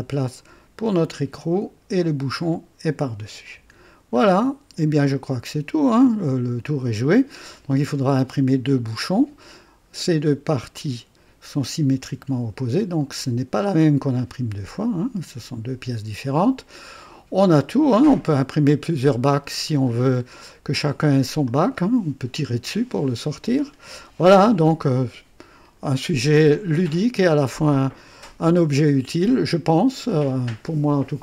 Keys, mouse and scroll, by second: 0.9-2.1 drag, 3.5 &, 4.1-4.5 scroll down 1, 5.0-7.1 drag, 8.2 click, 16.3 scroll down 2, 16.9-18.6 drag, 19.9 scroll down 1, 20.4-21.1 right drag, 21.4 click, 23.5-23.8 scroll down 2, 24.1-25.9 drag, 26.7 click, 28.1-28.4 scroll up 2, 28.8-29.5 right drag.